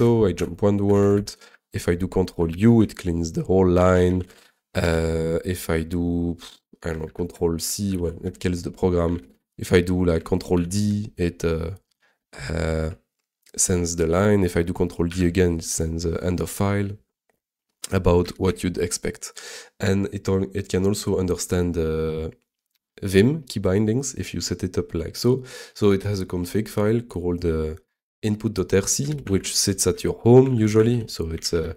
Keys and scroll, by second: 0.4 ctrl+Left, 0.9 ctrl+Right, 1.1 c, 4.1 c, 7.0 ctrl+c, 7.9 alt+k, 8.2 Return, 8.8-9.8 typing, 10.5 ctrl+d, 15.1 ctrl+d, 18.3 super+s.